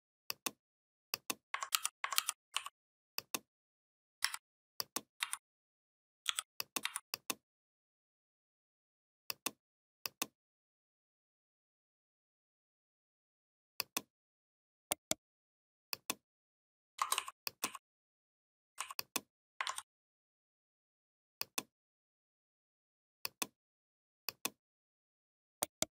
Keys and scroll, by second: 1.6 ctrl+g, 2.0 ctrl+g, 4.0 a, 5.0 v, 6.1 i, 6.7 v, 19.5 ctrl+z.